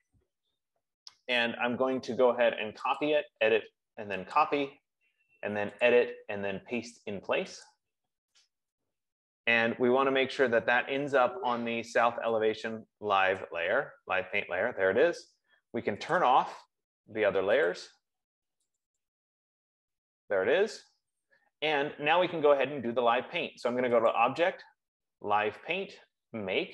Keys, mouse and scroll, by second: 3.5 click, 4.8 click, 6.3 click, 13.9 click, 16.7 click, 18.2 click, 19.2 click, 24.5 click.